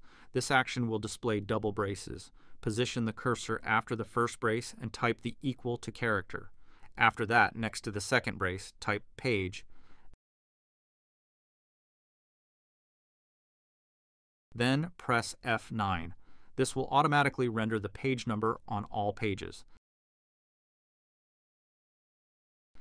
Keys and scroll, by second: 2.6 Left, 2.9 Left, 5.2 =, 5.9 Right, 6.7 Right, 6.8 Right, 7.8 BackSpace, 11.2-13.0 typing, 15.4 F9.